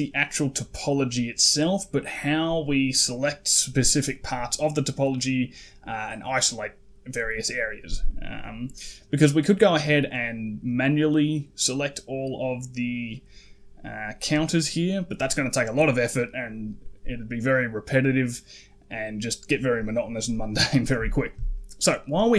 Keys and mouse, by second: 7.9 middle click, 9.0 middle click, 10.0 middle click, 11.8 middle click, 12.6 middle click, 13.3 middle click, 14.5 middle click, 15.2 middle click, 21.0 shift+middle click.